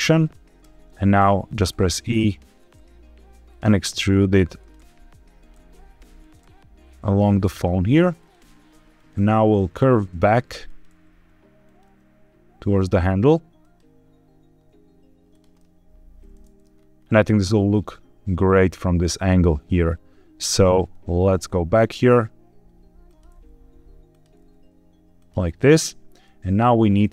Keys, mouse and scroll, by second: 0.1 click, 0.5 e, 1.4 click, 1.6 e, 2.5 click, 2.7 e, 3.4 click, 4.5 click, 4.7 e, 5.3 click, 5.5 e, 6.1 click, 6.3 e, 7.3 click, 8.1 click, 8.3 e, 8.9 click, 9.1 e, 9.7 click, 10.6 click, 10.8 e, 11.6 click, 11.8 e, 13.5 click, 14.5 e, 15.2 click, 15.5-16.5 middle drag, 16.7-17.6 scroll down 2, 17.6-18.2 scroll down 1, 18.4 scroll up 1, 21.1 KP_7, 22.1 e, 23.0 click, 23.2 e, 24.0 click, 24.3 e, 25.1 click, 26.2-27.1 middle drag.